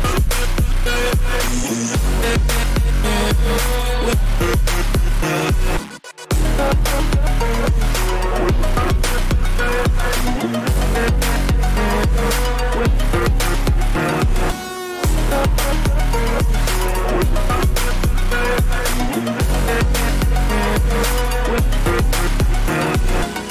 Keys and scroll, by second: 2.1 ], 10.2-11.8 typing, 13.1-14.1 typing, 15.6 v, 17.4 ctrl+t, 18.5 Return.